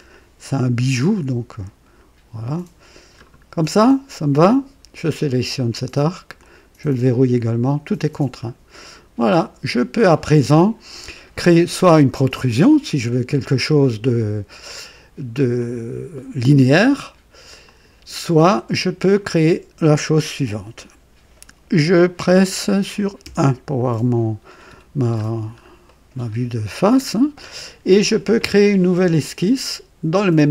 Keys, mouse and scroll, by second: 0.1-3.3 drag, 4.9 click, 6.3 click, 7.5-7.8 scroll down 1, 8.8 click, 15.5 click, 17.6 click, 23.2 KP_1, 23.4 KP_1, 25.0-25.6 scroll up 1, 25.9-26.4 right drag.